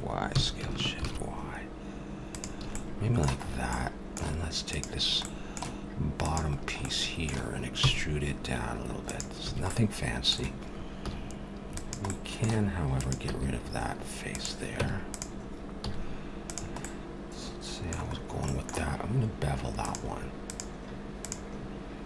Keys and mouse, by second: 0.3 s, 2.6 a, 2.9-4.6 middle drag, 4.6-8.6 drag, 7.8 e, 9.4 a, 9.7-11.8 middle drag, 11.0 z, 12.1 middle click, 13.0-14.6 drag, 13.3 x, 14.8 Tab, 15.8 z, 19.4 middle click, 19.8-22.0 drag.